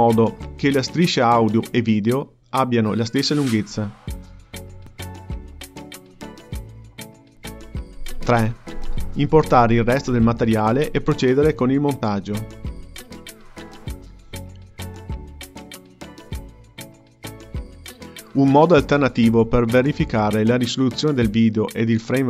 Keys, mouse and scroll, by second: 1.2-3.7 scroll down 10, 3.7-5.2 drag, 7.8-8.6 scroll down 1, 8.6-9.1 scroll down 9, 9.1 KP_Decimal, 9.5-10.5 ctrl+middle drag, 10.5 click, 11.4 g, 12.3 click, 13.0 scroll down 3, 13.2 ctrl+middle click, 13.7 g, 14.6-15.8 drag, 16.4-17.5 drag, 17.5 k.